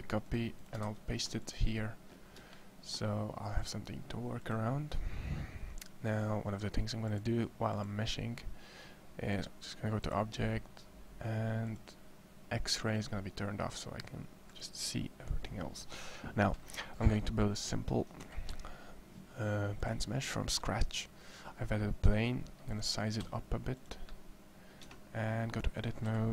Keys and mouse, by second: 0.1 middle click, 0.6 ctrl+v, 9.1 click, 18.0 shift+a, 21.8 s, 22.7 click, 23.0 s, 24.6 Tab, 26.2 a, 26.2 c.